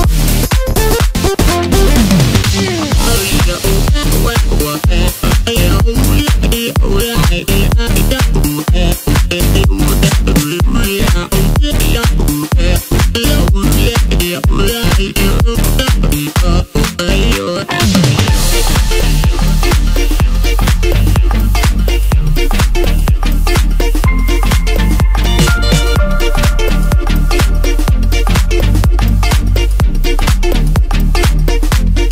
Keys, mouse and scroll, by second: 0.5 e, 2.4 g, 7.2 KP_3, 8.0 e, 13.5 KP_1, 15.3 s, 18.7 KP_3, 19.9 s, 26.3 KP_Decimal, 27.0-28.3 scroll up 6, 28.3 scroll up 1, 31.8 KP_1.